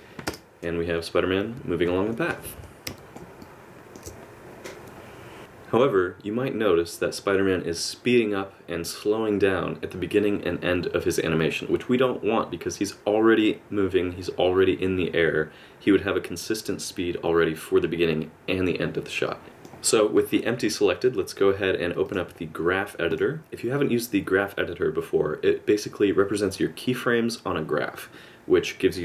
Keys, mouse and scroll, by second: 2.2 KP_Add, 3.2 KP_Add, 3.4 shift+middle click, 19.4 click, 22.0 click.